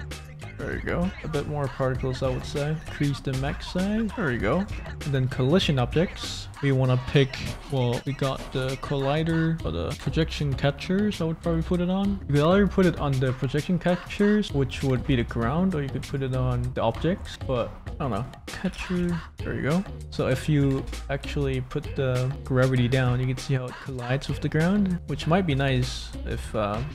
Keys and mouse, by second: 1.1 space, 2.8-4.1 drag, 4.1 space, 4.5 space, 5.6-6.7 drag, 5.6-6.7 middle drag, 7.6 click, 14.6-16.1 drag, 14.6-16.0 middle drag, 17.1 click, 18.0-19.4 drag, 19.3 middle click, 19.9 space, 20.7 space, 22.3-25.2 drag, 25.6 space, 26.6 ctrl+z.